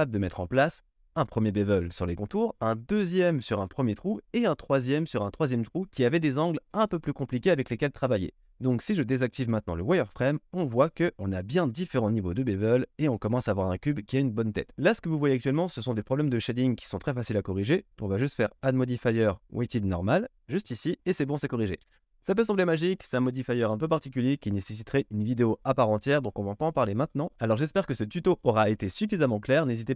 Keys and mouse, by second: 9.4 q.